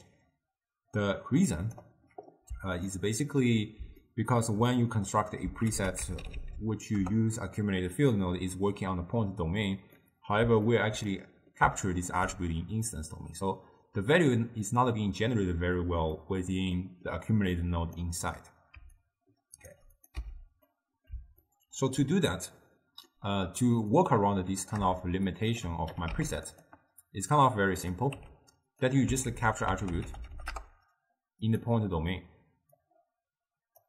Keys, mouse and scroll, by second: 3.0-5.8 ctrl+middle drag, 5.8 ctrl+a, 6.4 c, 10.1-15.0 middle drag, 16.2-17.7 middle drag, 17.7-18.9 drag, 18.9 d, 19.0 right click, 19.8 d, 20.1 click, 20.3 x, 20.8-24.1 middle drag, 24.1-25.4 drag, 26.0 g, 27.4-28.3 drag, 28.3 g, 29.4 ctrl+a, 32.9 click.